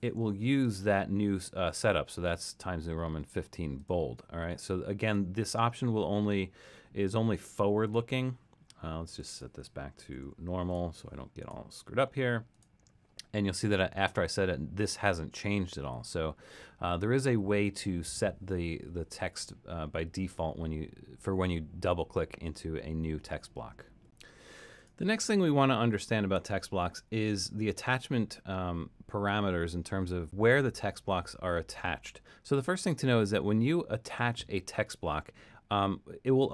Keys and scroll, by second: 9.8-10.7 typing, 25.8 super+-.